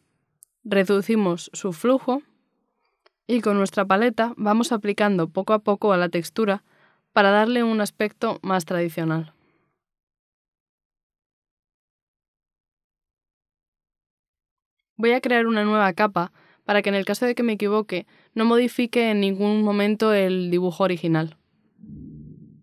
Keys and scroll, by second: 7.3 b.